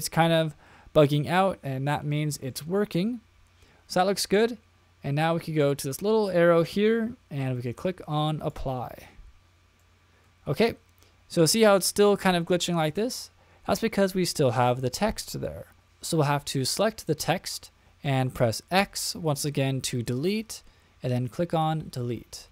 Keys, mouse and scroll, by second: 1.0 middle click, 2.1-3.6 middle drag, 5.7-9.0 drag, 9.8-11.4 middle drag, 12.1-13.0 middle drag, 18.8 x.